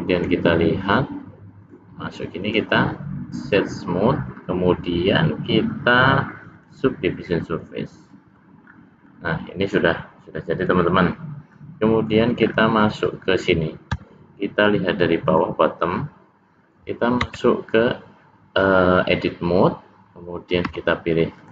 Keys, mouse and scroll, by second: 1.7 click, 2.5 right click, 5.1 click, 7.4-8.0 scroll up 1, 8.0 middle click, 8.7 scroll down 1, 8.8 scroll down 1, 9.1 middle click, 10.6 click, 11.6 middle click, 12.5-12.8 scroll down 2, 12.8 middle click, 13.1 scroll up 1, 13.2 scroll down 1, 14.0 `, 17.3 Tab, 20.7 c.